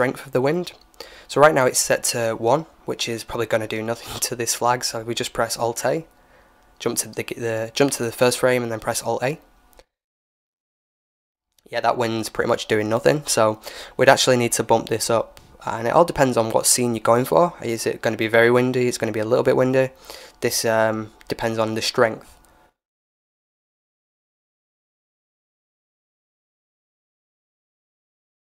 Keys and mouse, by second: 3.1-5.5 middle drag, 5.0-6.9 drag, 6.1 KP_1, 7.9-9.7 middle drag, 8.5 alt+a, 16.2-17.9 drag, 19.4-21.5 typing, 24.4-26.8 drag, 27.0 r.